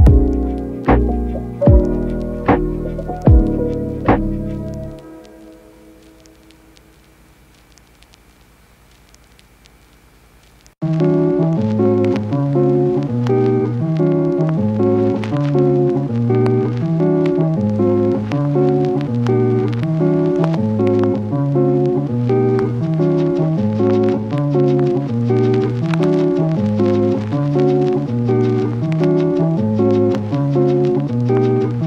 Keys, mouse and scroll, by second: 0.9 Tab, 1.2 click, 4.5 click, 4.5 right click, 10.7-12.8 typing, 12.2 Tab, 12.9 right click, 13.7 right click, 14.6 click, 14.7 g, 15.3 click, 16.3 g, 16.8 click, 17.3 e, 17.7 e, 19.0 e, 19.4 e, 21.7 click, 21.9-27.8 typing, 22.6 click, 22.9 click, 23.3 click, 23.8 click, 24.1 click, 24.6 click, 25.1 click, 26.2 click, 26.7 click, 28.8 click, 28.9 g, 29.1 click, 31.4 g, 31.5 click.